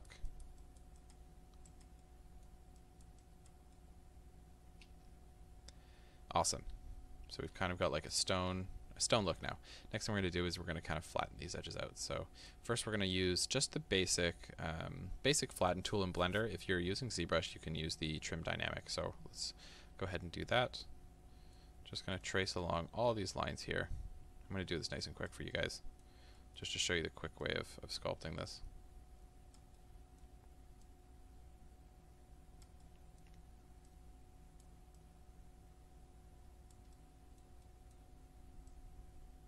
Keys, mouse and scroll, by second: 2.0 middle click, 2.8 click, 3.8-7.9 middle drag, 7.9-13.1 ctrl+drag, 18.1-22.2 middle drag, 22.2-25.6 drag, 25.6-27.4 middle drag, 27.4-29.8 drag, 29.8-30.9 middle drag, 30.9-32.9 drag, 32.9-33.9 middle drag, 33.9-37.0 drag, 37.0-38.7 middle drag, 38.7-39.4 drag.